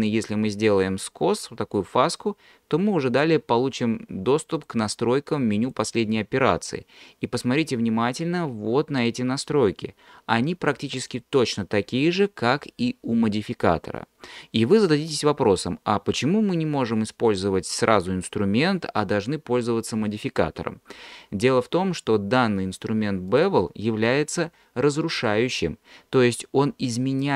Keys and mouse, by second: 0.7-1.8 drag, 4.6 click, 5.7 click, 23.3 click.